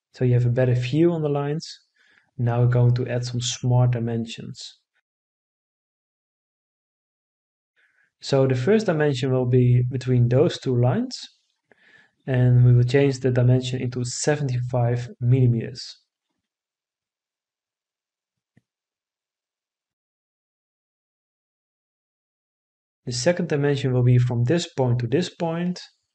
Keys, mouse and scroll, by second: 0.7 Escape, 15.7 7, 16.2 5, 17.2 Return.